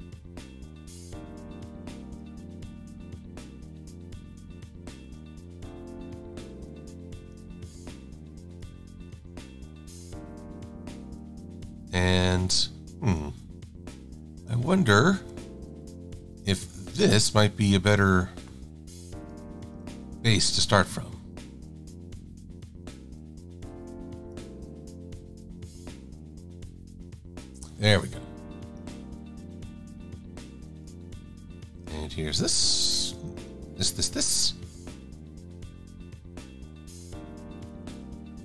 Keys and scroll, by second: 10.0 v, 16.2 Delete, 19.9 KP_Enter, 20.5 v.